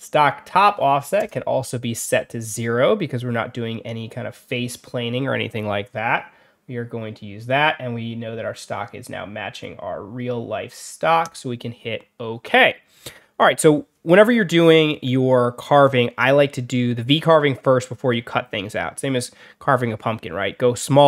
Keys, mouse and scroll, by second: 11.1 click.